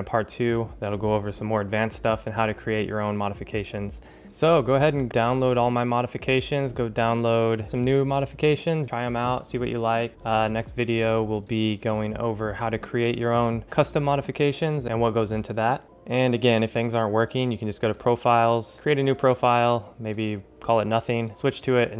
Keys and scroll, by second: 4.2 ctrl+alt+shift+super++, 15.8 ctrl+alt+shift+super++.